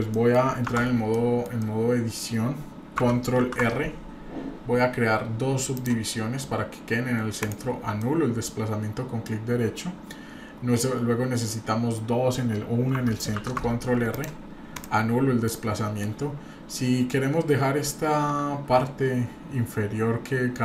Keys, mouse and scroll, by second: 0.1 middle click, 0.7 Tab, 1.1 middle click, 1.6 middle click, 3.3 ctrl+r, 8.0-9.2 middle drag, 13.4 ctrl+r, 15.5 middle click.